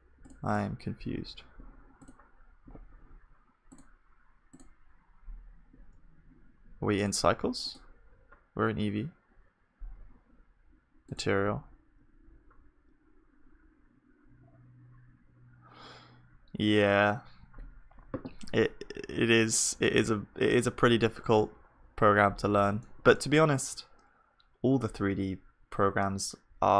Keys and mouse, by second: 18.7-26.7 middle drag.